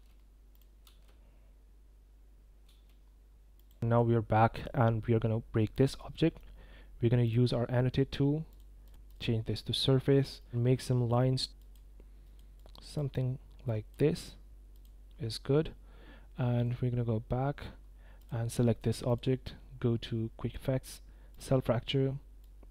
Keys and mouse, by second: 0.8 space, 2.7 space, 3.6 click, 6.1-6.4 middle drag, 7.2 click, 8.5 click, 8.8 click, 10.4 click, 11.6 click, 12.2 click, 12.6 click, 13.6 click, 14.7 click, 18.2 click, 19.2-22.7 drag.